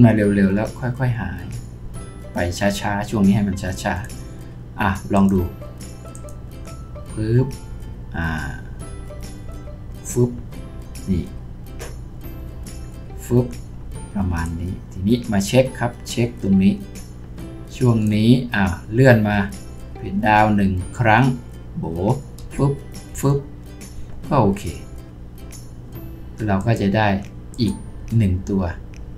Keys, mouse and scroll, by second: 21.0 Page_Down, 22.4 Page_Down.